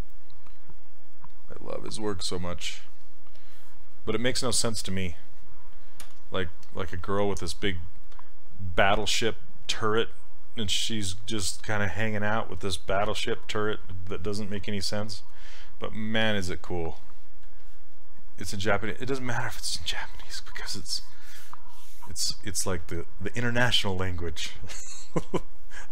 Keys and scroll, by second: 6.1 z, 25.3 z.